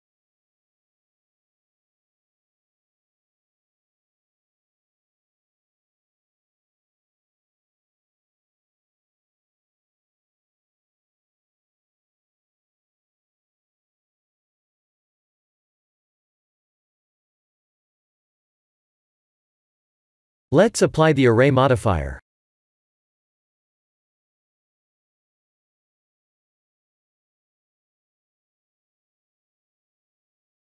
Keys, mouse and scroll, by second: 6.8 ctrl+z, 7.5 Tab, 9.4 s, 11.7 Tab, 15.2-16.5 scroll down 12, 16.3 middle click, 21.2 click, 21.9 click, 25.7 click, 28.7 click, 29.3-29.7 scroll up 7, 30.0 middle click.